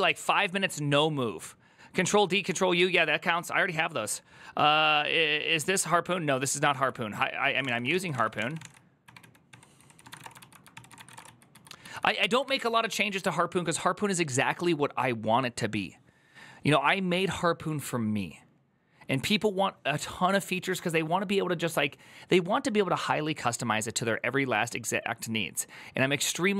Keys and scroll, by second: 6.5 alt+{, 7.3 ctrl+n, 7.4 ctrl+t, 7.4 ctrl+h, 7.8 ctrl+n, 8.1 ctrl+t, 8.1 ctrl+h, 8.8 ctrl+o, 9.6-10.8 typing, 10.5 ctrl+c, 10.9 Return, 11.0 ctrl+u, 11.3 ctrl+u, 12.3 alt++.